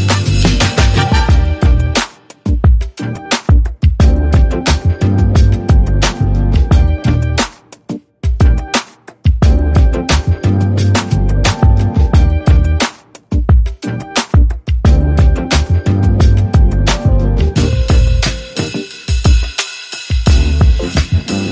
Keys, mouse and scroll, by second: 1.5 Down, 1.7 Down, 2.8 Down, 3.6 Down, 3.9 Down, 4.7 Down, 10.6 right click, 15.4 Right, 15.5 Right, 15.7 Right, 15.9 Right, 16.0 Right, 16.1 Right, 16.3 Right, 16.6 Down, 16.8 Down, 16.9 Down, 17.1 Down, 17.5 Left, 17.9 Left, 21.1 Left, 21.3 Left.